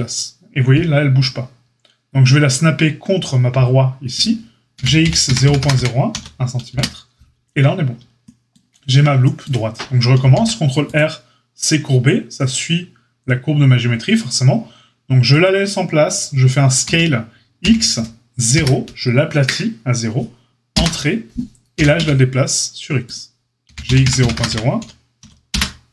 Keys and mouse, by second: 4.2-25.9 middle drag, 4.7 g, 10.1 ctrl+r, 16.8 s, 21.7 g, 23.6 g.